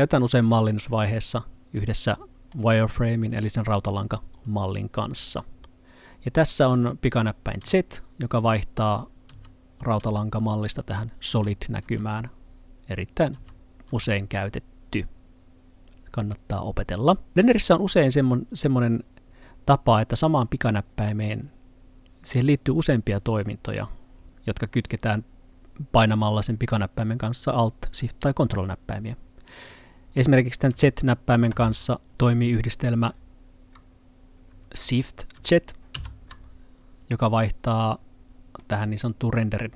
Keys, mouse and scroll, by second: 7.6 z, 10.0 z, 11.3 z, 11.9 z, 12.4-13.4 scroll up 1, 13.4 z, 13.9 z, 30.2-30.8 scroll down 1, 30.8 z, 31.5 z, 35.9 z, 38.7 middle click.